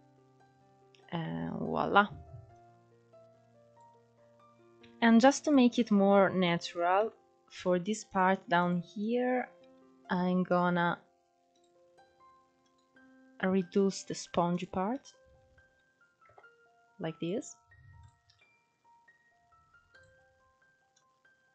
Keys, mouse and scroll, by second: 0.7 KP_1, 1.4-2.0 scroll up 2, 2.2 click, 3.6 scroll down 2, 3.8 middle click, 4.1 KP_Decimal, 5.2-5.5 scroll up 2, 5.8 middle click, 6.4-7.3 scroll up 1, 7.4 click, 8.0 alt+shift+click, 8.4 alt+shift+click, 10.8 click, 12.0-13.9 drag, 14.8 Tab, 15.6 KP_0, 16.5 drag, 16.9-17.3 scroll down 3, 17.3 click, 18.0-18.8 scroll up 2, 18.8-19.3 scroll up 3, 19.3 click, 20.3 click.